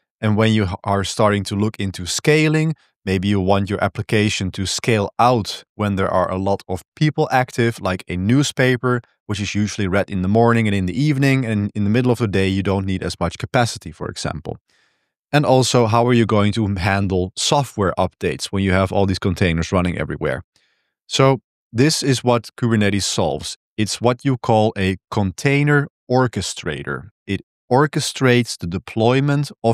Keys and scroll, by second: 14.8 j, 15.4 k, 15.7 j, 21.1 j, 23.0 j, 23.3 k, 23.9 l.